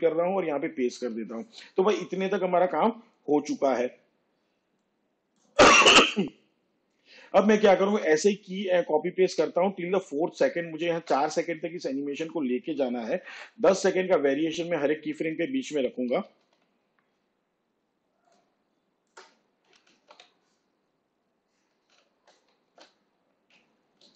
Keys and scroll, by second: 2.7 ctrl+c, 3.0 ctrl+v, 15.8 shift+Page_Down, 18.6 ctrl+c, 19.0 ctrl+v, 22.5 Down.